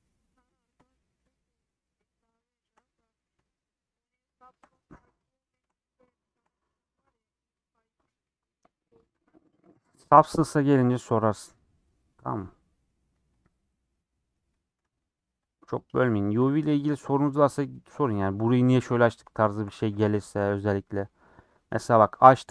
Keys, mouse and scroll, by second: 0.5 click, 1.3 shift+click, 1.8 shift+click, 2.5 shift+click, 2.8-4.0 middle drag, 4.2 shift+click, 5.4 shift+click, 6.1 shift+middle click, 6.9 click, 7.3 scroll down 4, 7.5-10.8 middle drag, 10.8-11.2 scroll up 3, 11.5 click, 12.1-13.4 middle drag, 13.4 click, 13.9 middle click, 14.8 scroll up 2, 15.5 click, 16.8-18.3 middle drag, 18.3 scroll up 2, 18.5 scroll down 5, 18.8 middle click, 19.3 scroll down 1, 19.5 shift+middle click, 19.8 a, 20.4 u, 22.4 click.